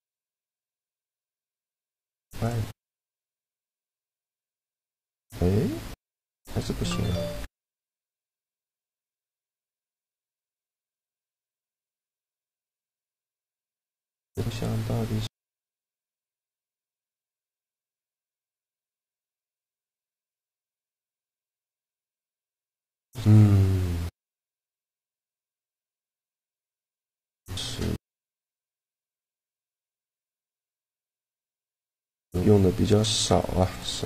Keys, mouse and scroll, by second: 2.1-3.3 drag, 3.2 right click, 3.5 shift+g, 7.2-8.4 middle drag, 7.6-11.1 drag, 12.4-15.4 drag, 17.1-18.8 middle drag, 20.4 right click, 20.7 middle click, 21.2 shift+g, 25.6-27.2 middle drag, 26.8 click, 27.2-28.8 right drag, 28.4 click, 28.4 middle click.